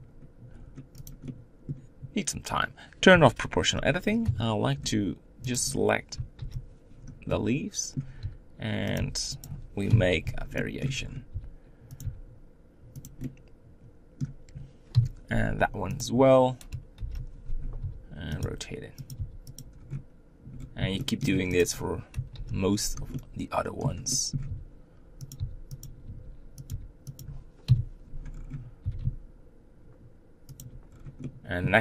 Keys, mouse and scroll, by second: 1.3-3.1 middle drag, 3.1 o, 4.2 KP_7, 5.5 click, 6.4 ctrl+l, 7.3 middle click, 8.2 r, 8.9 g, 9.9 KP_7, 10.6 shift+middle click, 11.0 scroll up 2, 11.3 r, 12.0 g, 13.2-14.9 middle drag, 14.9 KP_7, 16.1 click, 16.9 ctrl+l, 17.8 r, 18.4 g, 19.1 r, 19.8 scroll down 2, 20.6 scroll down 3, 21.0 shift+middle click, 21.2 shift+scroll up 1, 21.6 click, 22.3 ctrl+l, 23.1-24.5 middle drag, 24.5-27.6 typing, 28.3 scroll up 5, 28.8 g, 30.9 scroll down 3, 31.2-31.8 middle drag.